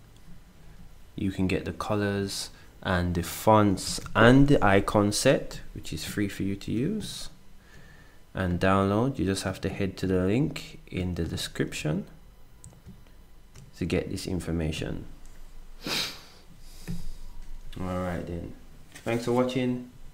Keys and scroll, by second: 3.8 ctrl+s.